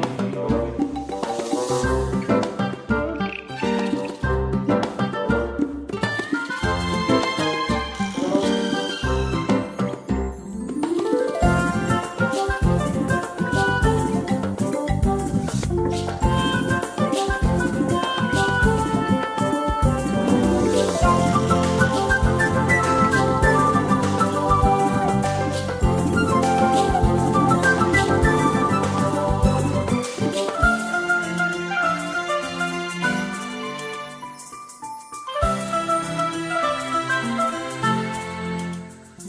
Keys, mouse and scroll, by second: 1.2 7, 4.0 click, 9.7 Left, 10.2 BackSpace, 10.4 7, 11.7 click, 14.2 click, 15.0 click, 15.4 shift+click, 16.0 shift+click, 17.5 ctrl+shift+click, 20.0 click, 24.2 click, 24.4 space, 25.0-25.6 scroll down 2, 27.6 ctrl+scroll up 1, 28.1 space, 31.0 scroll up 1, 32.0 space, 32.8 click, 33.6 click, 34.1 click, 34.7 click, 35.4 click, 36.5 click.